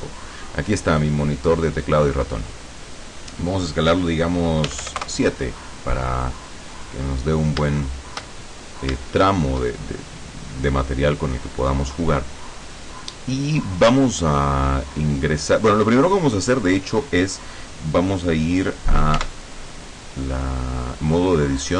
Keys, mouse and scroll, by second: 2.6-3.5 drag, 4.8 s, 5.0 KP_7, 5.2 KP_Enter, 6.3-6.9 scroll down 2, 6.9-7.4 scroll up 2, 7.9 shift+click, 8.6-9.8 shift+drag, 19.3 Tab.